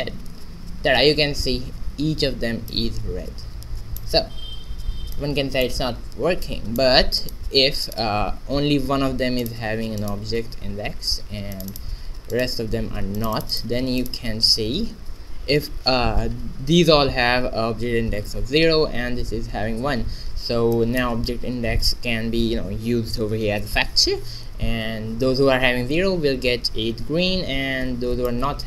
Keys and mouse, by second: 0.1 shift+z, 7.1-8.2 drag, 8.2-9.5 right drag, 9.4 click, 9.8 right click, 11.2 right click, 11.7 right click, 14.0 middle click, 20.7-22.6 middle drag, 28.3-28.6 middle drag.